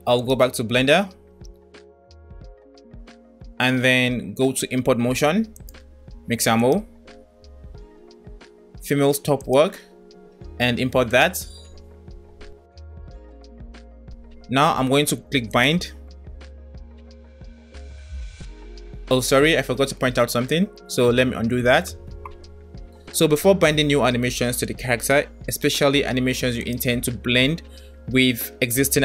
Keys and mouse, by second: 2.8 drag, 5.7 click, 7.3 click, 15.5 click, 21.5 ctrl+z.